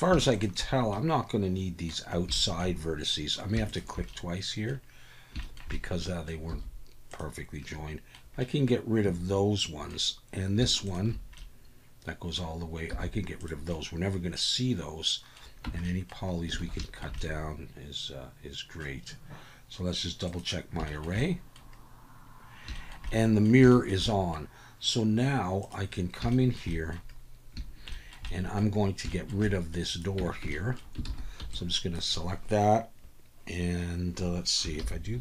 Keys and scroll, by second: 6.5 x, 12.9 x, 15.6 Tab, 16.6 alt+a, 30.2 Tab, 31.1 alt+a, 31.4 b, 34.8 ctrl+l.